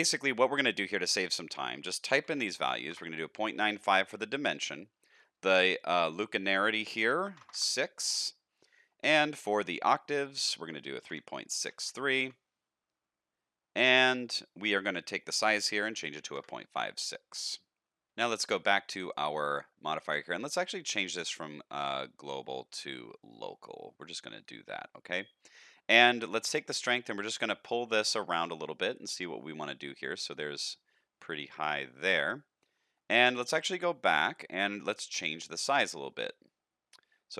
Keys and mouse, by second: 1.4-3.6 drag, 4.5-8.1 drag, 10.3-13.4 drag, 15.1-16.9 drag, 19.0 click, 20.7-23.3 drag, 26.3-32.1 shift+drag, 34.2 click, 35.6-37.3 drag.